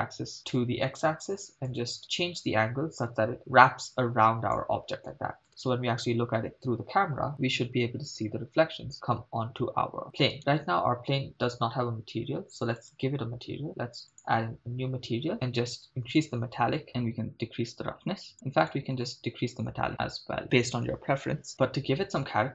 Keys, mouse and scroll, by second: 0.4 middle click, 1.7-4.6 drag, 5.5 KP_0, 10.4 right click, 12.8 click, 14.1 click, 15.3 middle click, 16.2-18.3 drag, 18.7-20.4 drag, 21.5 middle click, 21.5-22.5 scroll down 2.